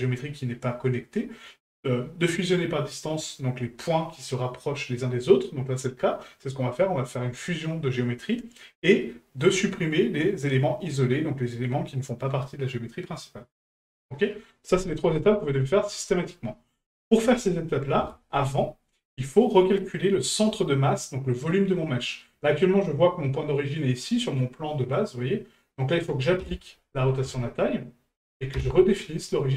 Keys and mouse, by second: 22.0 middle drag.